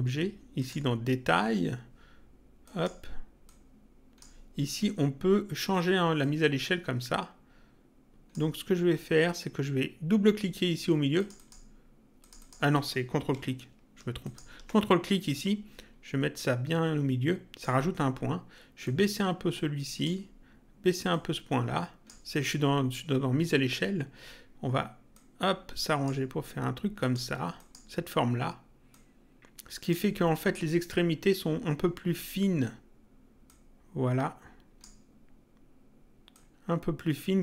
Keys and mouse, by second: 2.6 click, 6.1 click, 11.1 click, 14.1 ctrl+click, 18.8 click, 21.1 click, 25.1 click, 26.9 click, 28.9 click, 33.4 click, 36.3 click.